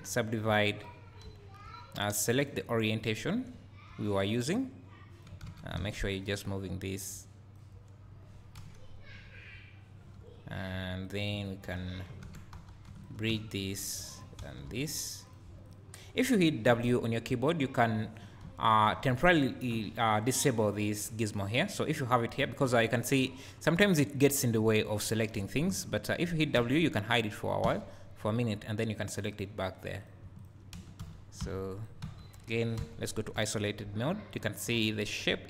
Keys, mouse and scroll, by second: 1.2 `, 3.0 click, 3.7-6.2 drag, 5.4 ctrl+z, 5.8 alt+a, 6.8-8.5 drag, 8.5 KP_1, 8.6 click, 11.4 click, 13.0 click, 13.9 click, 15.7 click, 18.4 `, 20.7 click, 22.4 `, 23.1 click, 25.7 shift+click, 26.5 w, 27.7 f, 30.0 click, 30.4 shift+click, 30.8 f, 31.0 g, 31.8 right click, 32.0 Tab, 32.8 KP_Divide.